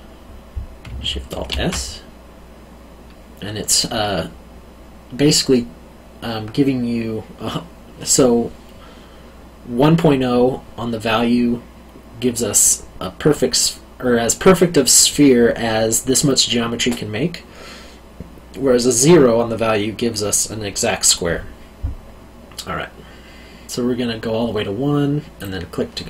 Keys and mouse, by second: 1.3 alt+shift+s, 25.3 click.